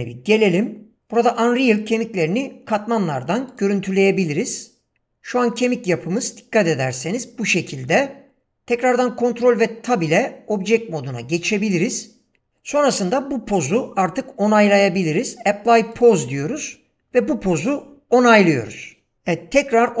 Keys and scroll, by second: 9.9 ctrl+Tab.